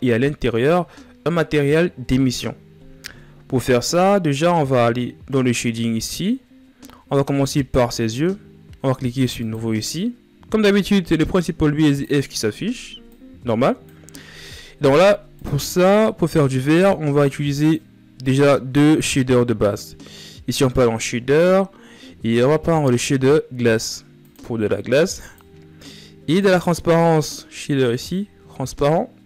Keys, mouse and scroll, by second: 2.4-3.5 scroll down 7, 6.6-7.2 shift+scroll up 4, 9.1-19.5 drag, 23.9 click.